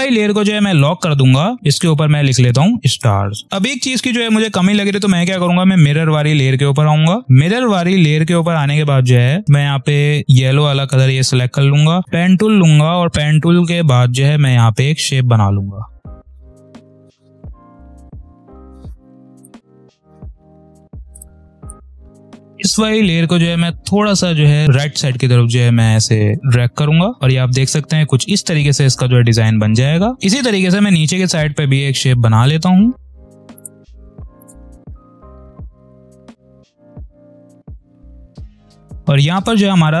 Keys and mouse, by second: 2.6 s, 3.4 click, 5.0 click, 6.9 space, 7.1 click, 7.2 space, 8.2 p, 9.0 space, 9.2 click, 10.2 i, 10.7 click, 11.7 p, 12.3 space, 12.5 click, 13.1 space, 14.3 click, 16.9 ctrl+z, 17.1 click, 17.8-22.4 ctrl+drag, 24.1-27.1 ctrl+drag, 27.1 click, 27.3 space, 29.2 ctrl+click, 30.1 space, 31.4 click, 34.0 i, 34.1 click, 34.3 v, 34.5 click, 35.0 p, 35.2-36.3 ctrl+drag, 36.3 ctrl+click, 37.0 ctrl+click, 37.4-38.6 typing, 37.4 click, 37.6 ctrl+click, 38.2 click, 38.5 click, 39.4-40.0 ctrl+drag.